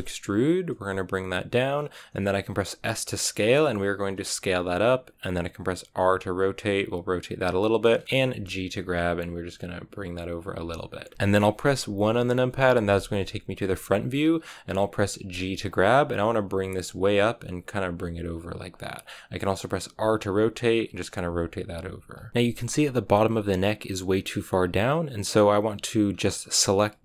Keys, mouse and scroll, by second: 2.5 s, 5.8 r, 7.9 shift+middle click, 8.1 g, 9.9 r, 10.4 g, 11.1 KP_3, 12.8 KP_1, 14.1-14.4 scroll up 2, 15.2 g, 19.8 r, 21.0 g, 21.5 r, 22.3-26.0 shift+middle drag, 26.0-27.0 scroll up 1.